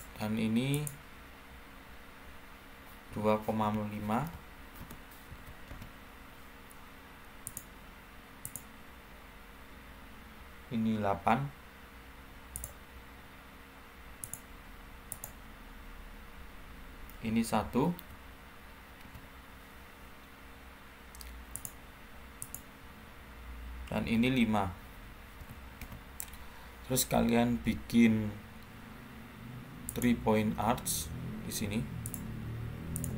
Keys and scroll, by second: 3.0-5.2 typing, 5.6 Return, 17.9 1, 18.9 Return, 25.3 5, 25.7 Return.